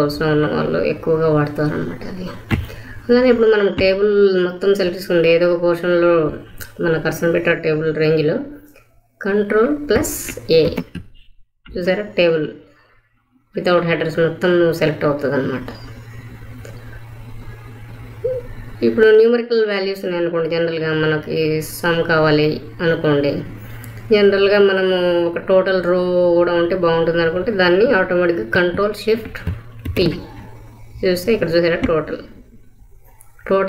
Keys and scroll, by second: 10.6 ctrl+a, 29.8 ctrl+shift+t.